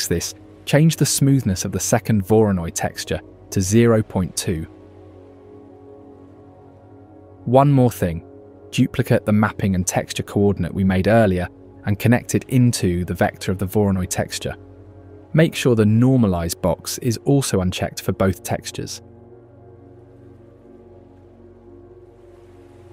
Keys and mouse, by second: 3.4 middle click, 4.4-6.0 drag, 8.1 click, 8.5 shift+click, 8.9 shift+d, 10.5 click, 12.0 alt+p, 14.0 g, 16.4 click, 17.6 alt+click, 18.1-18.4 alt+drag, 18.4 alt+right click, 20.3 shift+click.